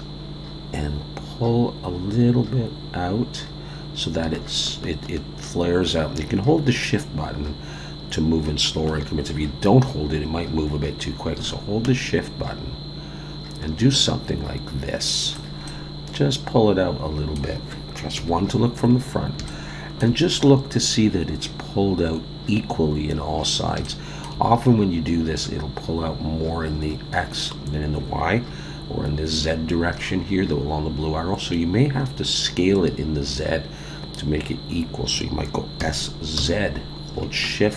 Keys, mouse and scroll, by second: 15.7 middle click, 18.2 KP_1, 19.1-19.4 scroll up 3, 19.4 shift+middle click, 23.6 scroll up 2, 23.8 shift+middle click, 35.8 s.